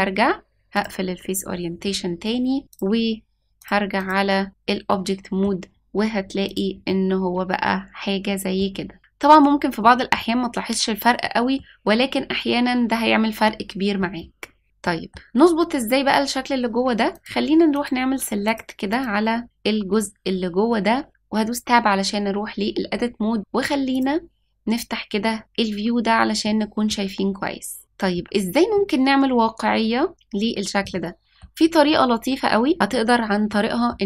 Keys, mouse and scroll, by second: 2.6 click, 3.5-4.1 drag, 4.8-5.4 middle drag, 6.4 click, 6.8-8.5 middle drag, 9.8-10.2 middle drag, 11.2-11.6 middle drag, 14.6 scroll down 1, 14.8 middle click, 17.1 click, 17.7 click, 18.4 click, 18.8 click, 19.9-21.1 scroll up 1, 21.1 Tab, 21.1-22.0 scroll up 1, 23.9 click, 26.4 middle click, 27.4 middle click, 28.7-30.1 middle drag, 30.9 middle click, 33.4 middle click.